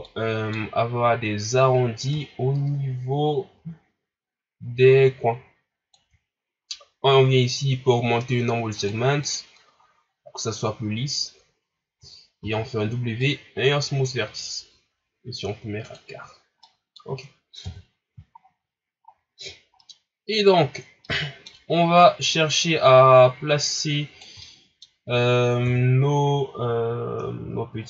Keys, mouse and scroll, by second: 0.0 middle click, 0.6-1.8 scroll up 1, 1.8 scroll up 1, 2.1-5.1 shift+drag, 8.7 click, 9.7 scroll up 4, 12.4 w, 13.6 scroll down 4, 14.4 scroll down 2, 15.8-16.6 drag, 16.6-17.6 middle drag, 17.6 KP_1, 18.4 scroll down 2, 19.0 scroll up 4, 19.8 middle click, 20.6 scroll up 3, 21.0 middle click, 22.0-24.4 drag, 24.4-25.6 middle drag, 25.6 KP_3, 26.4-27.4 ctrl+scroll up 8.